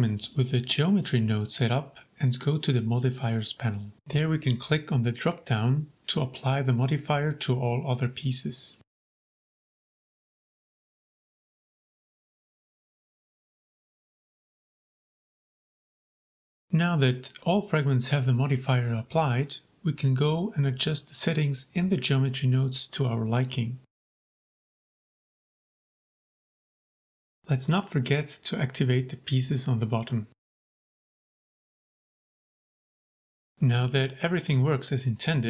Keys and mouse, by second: 0.7 shift+click, 2.4 click, 3.6-5.5 drag, 7.4-8.9 middle drag, 9.4 a, 9.7-10.3 middle drag, 10.8 click, 12.1 middle click, 12.4 click, 13.1 g, 13.3 z, 17.6 click, 17.9 shift+click, 20.4-26.2 drag, 26.5-27.2 middle drag, 28.4 click, 29.5 g, 29.6 z, 33.8 click.